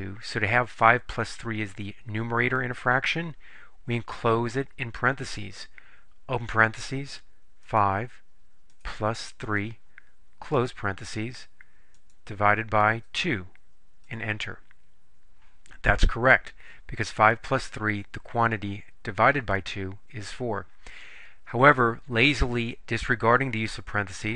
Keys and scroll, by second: 6.6 (, 7.7 5, 9.5 3, 10.7 ), 12.1 /, 13.1 2, 14.1 Return.